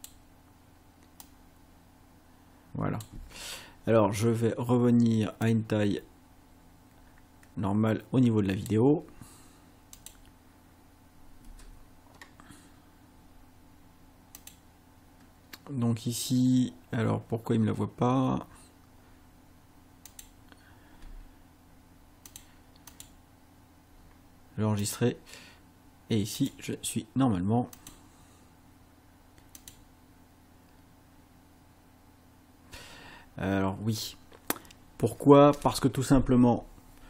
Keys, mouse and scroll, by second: 1.2-3.3 drag, 5.5-8.9 drag, 10.0 click, 11.5 space, 14.5 click, 20.2 click, 21.1 space, 22.3 click, 22.9 click, 24.9 click, 26.4 click, 27.8 click, 29.6 click.